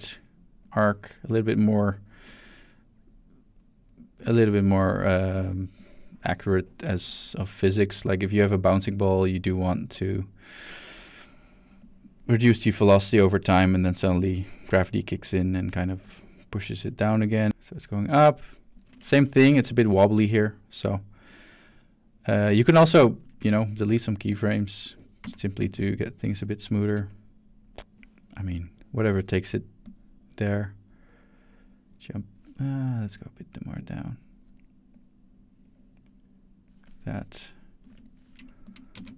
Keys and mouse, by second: 0.6-1.9 drag, 2.5 ctrl+middle click, 3.6 ctrl+middle click, 4.1 ctrl+middle click, 5.3 click, 5.8 drag, 8.0-10.6 drag, 11.8-19.2 drag, 19.2-19.7 shift+middle drag, 23.1 shift+middle drag, 23.7 shift+middle drag, 24.3 ctrl+shift+drag, 25.2 shift+x, 25.6 click, 26.4 click, 27.1-29.2 drag, 29.8-32.4 drag, 33.1-34.4 drag, 34.9 click, 35.6-36.7 drag, 38.9 space.